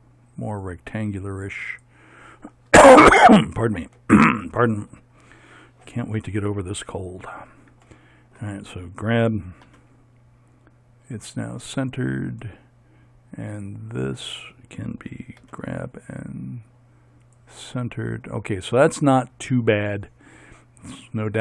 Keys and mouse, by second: 7.2 right click, 8.1-9.7 drag, 9.7 g, 15.4 g.